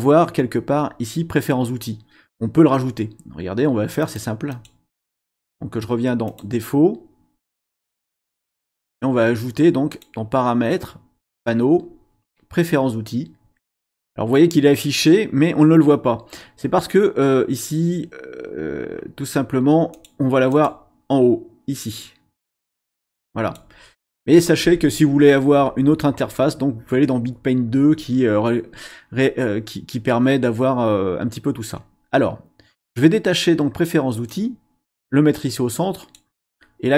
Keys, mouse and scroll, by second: 4.0 click, 4.5 click, 6.3 click, 7.7-8.1 scroll up 1, 9.9 click, 19.9 click, 20.5 scroll up 1, 20.6 click, 22.6-23.7 drag, 34.3-36.3 drag.